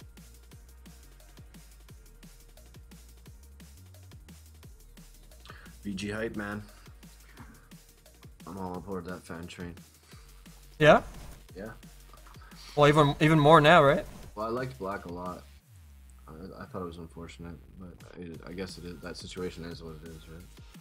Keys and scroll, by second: 2.8 s, 11.9 ctrl+z.